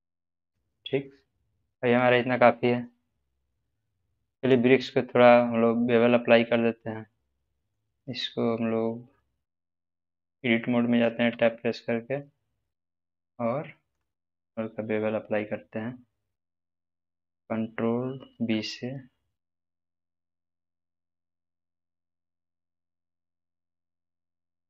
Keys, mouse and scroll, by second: 1.0-3.5 middle drag, 4.3 click, 5.4-7.9 middle drag, 13.0-13.9 middle drag, 18.2 ctrl+b.